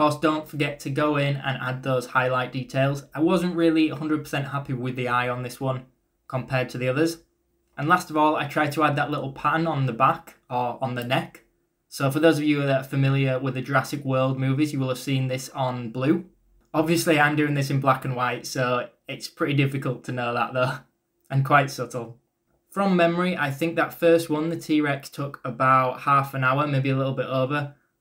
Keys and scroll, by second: 0.3 ctrl+z, 18.4-21.6 typing, 23.0-26.0 typing.